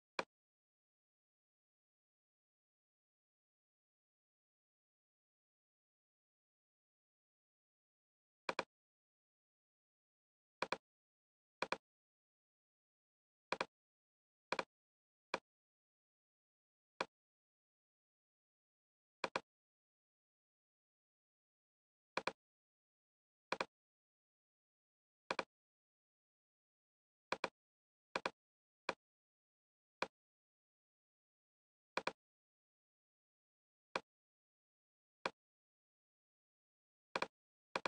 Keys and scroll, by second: 4.6 shift+f, 5.4 Return.